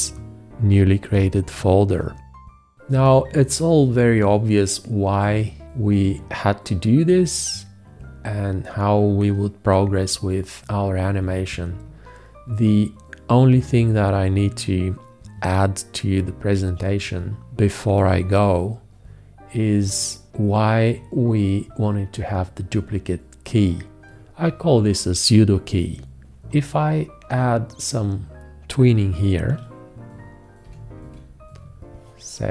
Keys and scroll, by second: 30.9 4.